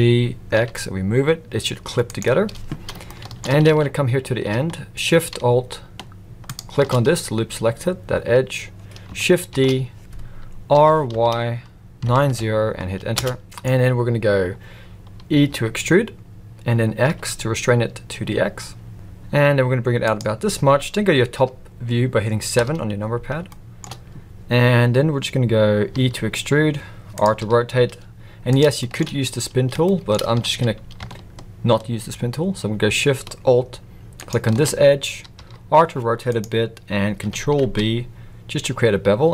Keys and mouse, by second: 3.0-3.4 shift+middle drag, 3.6 alt+a, 9.5 shift+d, 13.4 middle click, 15.5 e, 22.5 KP_7, 23.4 shift+middle click, 25.9 e, 27.4 r, 28.8 shift+middle click, 29.9 shift+middle click, 30.4 alt+a, 34.1 alt+shift+click, 35.3 r, 37.6 ctrl+b.